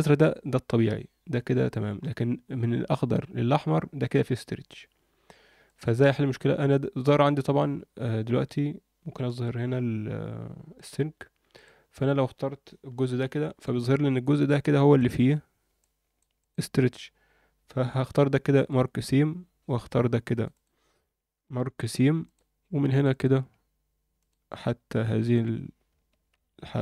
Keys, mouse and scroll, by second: 0.0-1.9 scroll down 1, 1.9-2.7 scroll up 4, 5.6 click, 8.1 a, 9.7-10.9 scroll up 4, 10.9 click, 11.5 click, 12.9 ctrl+l, 14.2-14.6 scroll down 2, 14.6 alt+middle click, 15.1-15.5 scroll up 3, 15.8 alt+middle click, 16.4 click, 17.9 ctrl+e, 19.8 2, 20.3 click, 20.5 click, 21.6 ctrl+e, 22.9 click, 24.1 click, 25.2 ctrl+click, 26.3 ctrl+e.